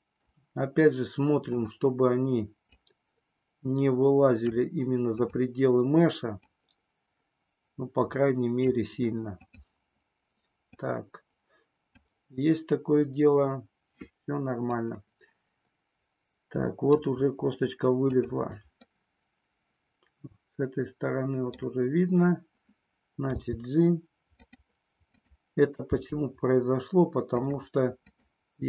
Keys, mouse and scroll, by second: 0.3-1.5 scroll down 1, 1.5 click, 2.8-4.4 drag, 5.0 click, 6.3-8.5 drag, 9.4 click, 10.6-12.0 drag, 14.9-17.0 middle drag, 18.0 click, 18.9-21.5 middle drag, 23.4 g, 24.5 click, 25.2 click, 25.8 g, 27.3 click.